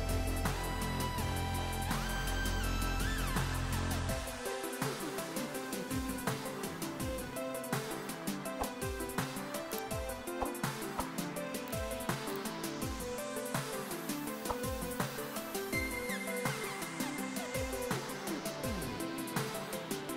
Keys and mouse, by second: 15.9 ctrl+1, 16.0 click, 16.4 click, 17.0 click, 17.3 ctrl+e, 17.4 click.